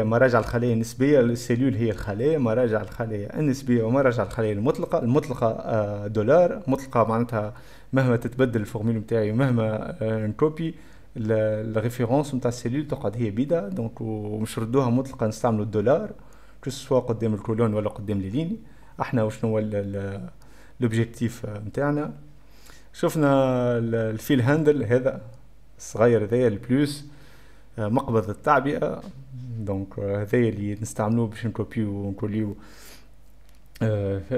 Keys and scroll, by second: 2.2 F2, 17.6-18.5 typing, 19.3 F6.